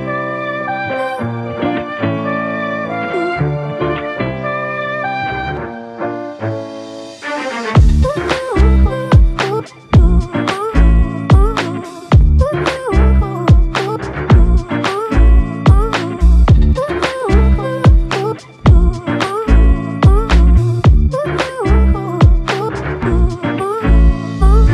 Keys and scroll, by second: 16.4 scroll up 1, 22.7 scroll down 1, 23.7 scroll down 2.